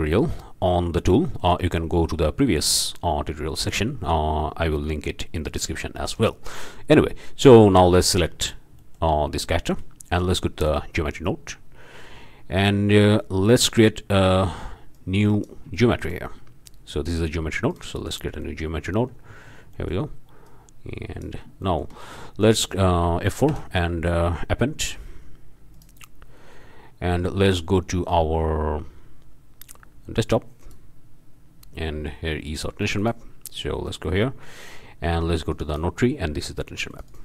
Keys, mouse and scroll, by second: 0.4 click, 0.8 scroll up 1, 1.3-1.6 shift+drag, 7.1 click, 7.4 scroll up 1, 7.7-8.1 shift+drag, 8.4 shift+drag, 9.4 shift+click, 9.5 shift+click, 10.6 click, 14.9 click, 15.8-16.2 shift+drag, 17.7 click, 18.4 click, 18.8-19.5 scroll up 1, 19.5 scroll up 1, 19.7 click, 19.9 middle click, 20.0 click, 20.5-20.9 drag, 21.0 click, 21.7-22.0 shift+middle drag, 22.2 shift+middle click, 22.4 shift+click, 23.5 F4, 25.7 click, 30.6 click, 32.8 click, 34.3 scroll down 1, 35.0-35.4 scroll down 1, 35.5-36.0 drag, 36.9 click.